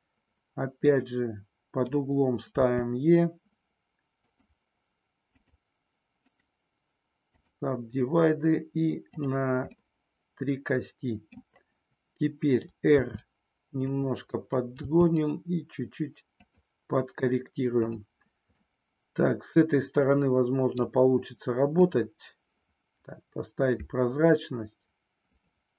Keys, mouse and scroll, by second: 2.6 e, 4.2 click, 5.3 click, 9.0 click, 9.7-11.4 middle drag, 12.9 r, 14.9 g, 16.4 click, 18.6-20.9 middle drag, 21.8 click, 25.3 click.